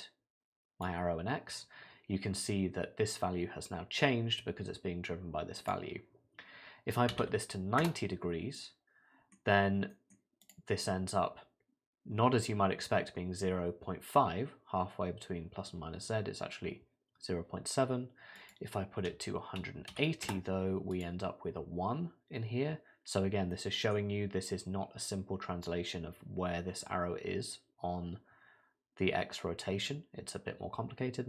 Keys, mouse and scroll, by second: 5.6 click, 8.6 middle click, 9.5 scroll down 2, 9.9 middle click, 10.4 click, 18.4 click, 20.9 click, 22.1 scroll down 3, 23.1 scroll up 1, 23.5 middle click, 24.2 scroll down 1.